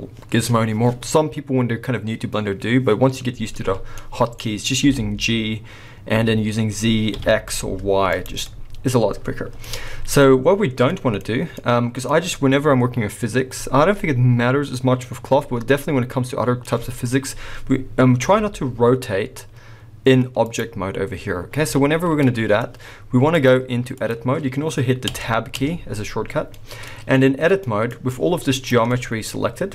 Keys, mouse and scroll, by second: 3.9-4.8 middle drag, 4.3-4.8 scroll, 4.8 g, 8.2 right drag, 8.5-18.2 middle drag, 9.1-9.6 scroll, 10.3-10.9 scroll, 11.5 scroll, 18.2 r, 20.5-21.8 right drag, 21.8-23.4 middle drag, 23.4 click, 25.1 Tab, 25.1-25.5 drag, 26.5 middle click, 27.1-27.7 scroll down 1, 27.7 middle click, 28.1 click, 28.2 click, 28.9 middle click.